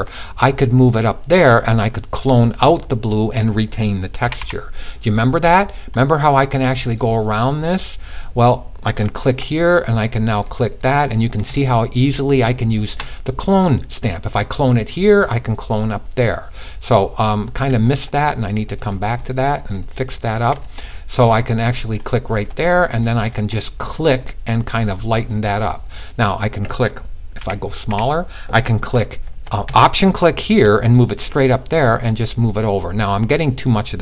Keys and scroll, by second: 1.5 typing, 3.7 typing, 26.9-27.3 typing, 33.8 super+z.